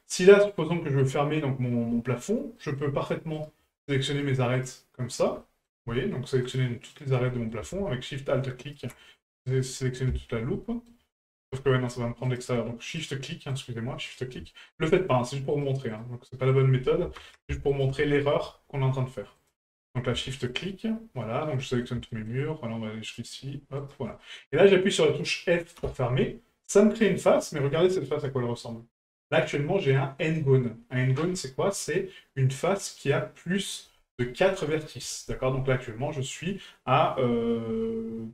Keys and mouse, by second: 0.7-1.0 middle drag, 2.6 middle drag, 3.4 right click, 4.2 shift+right click, 4.5 shift+right click, 5.1 shift+right click, 5.4 middle drag, 6.4 shift+right click, 6.9 shift+right click, 7.3 middle drag, 8.6 alt+shift+right click, 9.2-9.8 middle drag, 10.1 shift+middle drag, 10.6-10.9 middle drag, 11.7 middle drag, 12.3 shift+right drag, 12.9 shift+right click, 13.5 shift+right click, 14.1 shift+right click, 14.5 middle drag, 15.5 shift+right click, 15.9 shift+right click, 16.5 shift+right click, 17.7 shift+right click, 18.1 middle drag, 19.4 shift+right click, 20.4 shift+right click, 21.6 middle drag, 22.1 shift+middle drag, 23.1 shift+right click, 23.8 shift+right click, 24.2-24.6 middle drag, 26.7 middle click, 29.9 click.